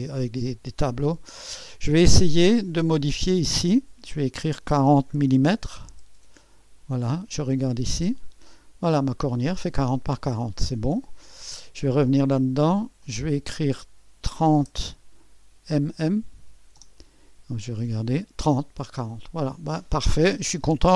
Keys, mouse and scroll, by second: 0.0 click, 2.6 click, 3.7 click, 4.2 4, 4.6 0, 5.6 m, 5.9 m, 6.6 click, 7.6 typing, 8.1 click, 8.9-9.9 scroll down 1, 9.4 middle click, 10.0 click, 10.0 typing, 11.3 click, 12.8-16.1 typing, 13.0-14.2 drag, 16.7 Return, 17.9-18.9 drag, 17.9 typing.